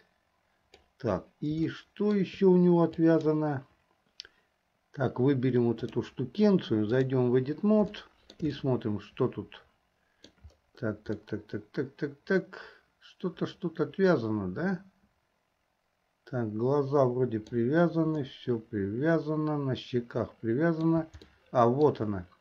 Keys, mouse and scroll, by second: 1.8-2.4 shift+middle drag, 3.1 click, 5.9-7.4 drag, 8.2 shift+middle click, 8.7-10.5 middle drag, 11.4-17.6 middle drag, 18.3-20.9 middle drag, 21.4 shift+middle click.